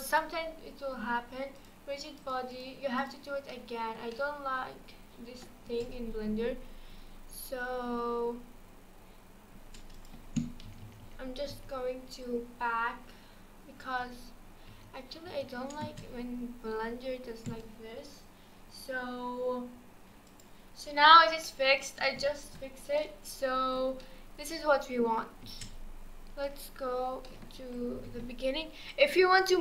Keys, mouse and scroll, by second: 1.6-2.3 drag, 2.5-3.5 drag, 3.5-5.6 middle drag, 5.6 space, 9.6 space, 9.9-10.7 drag, 10.7 ctrl+z, 10.8 ctrl+z, 11.0 ctrl+z, 11.5 ctrl+z, 13.8 ctrl+z, 14.7 ctrl+z, 15.3 ctrl+z, 15.8 space, 17.5 space, 21.4-25.4 middle drag, 25.4 space, 26.4-27.3 drag, 27.3 middle click, 27.9 KP_1, 28.9 click.